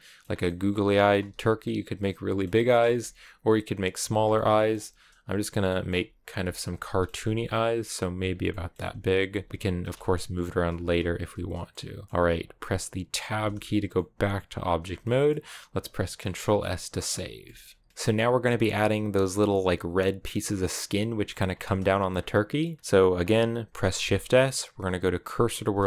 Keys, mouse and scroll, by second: 0.1 scroll up 1, 0.3 middle click, 1.1 g, 1.4-2.6 middle drag, 2.6 scroll up 1, 2.8-10.7 typing, 4.1 middle click, 5.5 middle click, 6.6 middle click, 8.3 middle click, 11.3 scroll down 1, 11.5-13.1 middle drag, 13.1 Tab, 13.5 a, 13.8-15.2 middle drag, 15.2-16.1 scroll up 2, 16.1 scroll down 2, 16.4-21.3 middle drag, 21.3-22.0 scroll down 2, 22.0-25.6 middle drag, 25.6 shift+s.